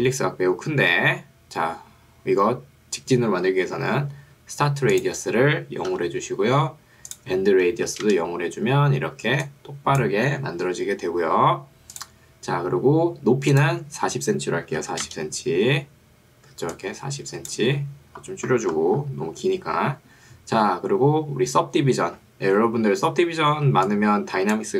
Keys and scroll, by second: 6.0 0, 8.2 Return, 9.4 ctrl+2, 10.6 Escape, 14.8 0, 15.2 Return, 16.6 ctrl+2, 17.8 Escape, 23.8 ctrl+2.